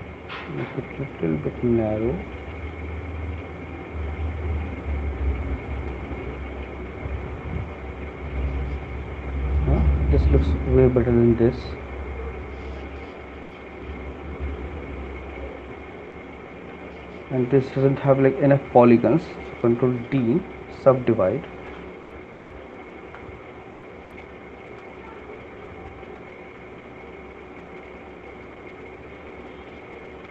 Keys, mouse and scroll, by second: 0.3 click, 1.4 click, 4.8 click, 5.7 click, 8.1 shift+click, 8.3 shift+click, 9.4 click, 9.8 shift+click, 10.6 alt+click, 12.7 alt+click, 15.0 right click, 17.9 alt+click, 19.7 ctrl+d, 23.1 right click, 24.6 f, 27.7 alt+click, 29.2 click.